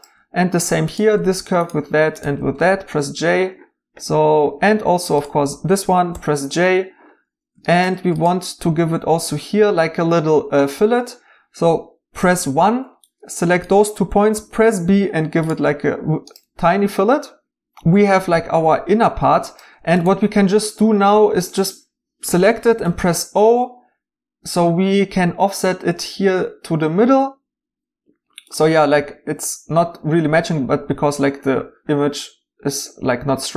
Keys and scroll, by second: 3.0 j, 6.1 j, 12.2 1, 14.3 b, 21.1 2, 22.7 o.